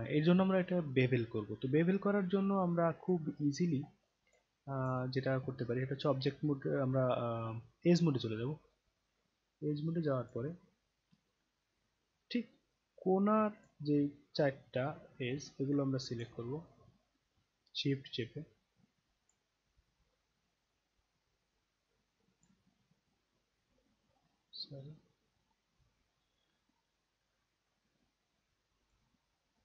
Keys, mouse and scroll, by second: 0.4-1.8 alt+drag, 2.2-2.6 scroll down 1, 2.8 alt+click, 3.4-3.8 alt+scroll up 1, 3.8-4.1 alt+scroll down 1, 4.1 alt+click, 4.5 alt+click, 5.6-8.7 right drag, 10.2 click, 11.6-12.1 alt+middle drag, 13.6 click, 14.5 scroll down 1, 15.3-16.2 alt+drag, 19.2 shift+click, 20.1-22.5 alt+drag, 22.6-25.5 shift+right drag, 26.5 alt+right click, 27.8 shift+click.